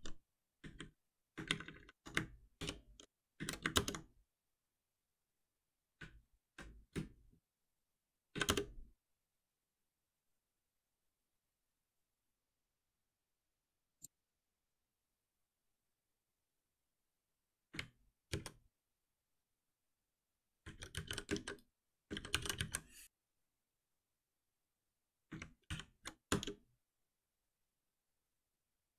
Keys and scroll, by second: 0.6 Escape, 2.6 ctrl+F6, 18.3 ctrl+alt+m, 25.7 ctrl+alt+p.